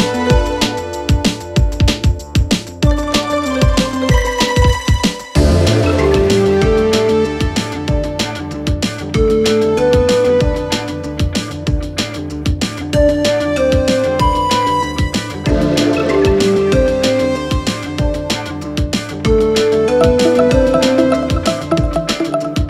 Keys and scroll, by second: 6.7 Escape, 8.5 ], 10.4 4, 10.9 2, 21.4 ..